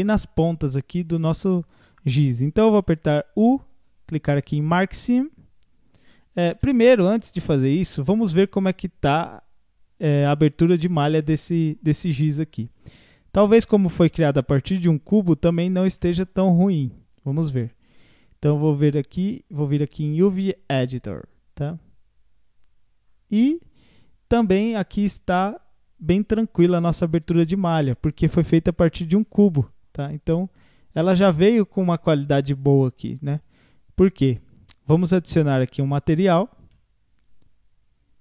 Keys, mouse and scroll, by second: 1.2-2.8 middle drag, 2.8 u, 6.5 ctrl+z, 9.1-16.3 drag, 13.6 scroll down 1, 14.0-15.4 middle drag, 15.4-15.9 scroll up 4, 16.0 middle click, 16.3-18.0 scroll down 3, 18.0-21.1 drag, 23.0-23.8 scroll up 6, 24.4 click, 25.5-26.7 middle drag, 26.7 scroll down 1, 26.9-29.9 middle drag, 29.9-31.5 scroll up 12, 31.5-31.9 scroll down 6, 33.5 a, 33.7 a, 36.7 Tab, 37.5 click.